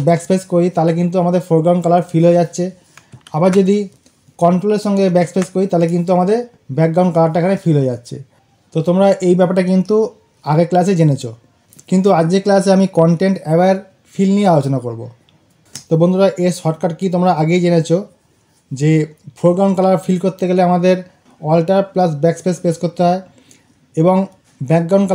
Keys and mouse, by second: 3.0 click, 3.3 ctrl+z.